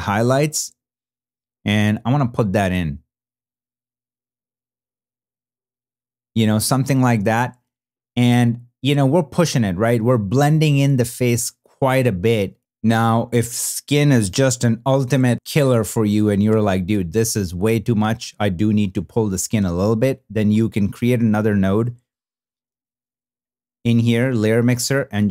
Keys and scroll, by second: 22.4 super+=.